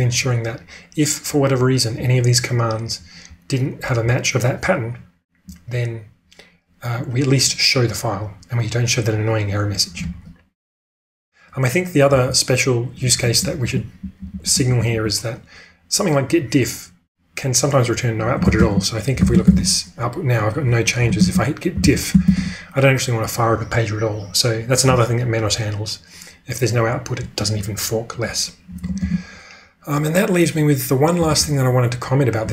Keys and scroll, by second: 12.0 k, 13.1-14.8 typing, 18.4 ctrl+space, 19.1-19.6 typing, 20.7-22.7 typing, 28.8 ctrl+space, 31.3 typing.